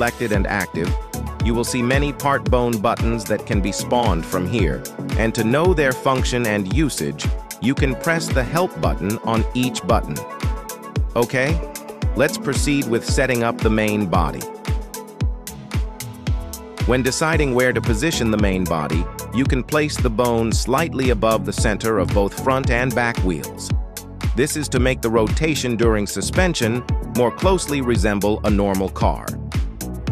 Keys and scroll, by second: 12.2 g, 12.3 z, 13.9 KP_3, 14.3 g, 14.8 z, 21.1 g, 21.1 z.